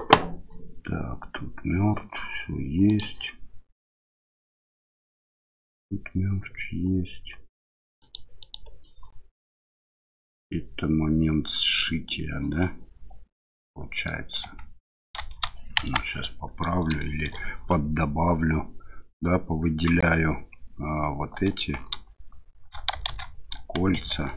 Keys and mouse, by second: 2.9 click, 8.0 click, 8.4 click, 12.6-14.1 middle drag, 14.4 Tab, 15.3 shift+middle click, 15.8 KP_1, 17.0 shift+click, 21.4 alt+click, 23.1 shift+z, 24.2 ctrl+click.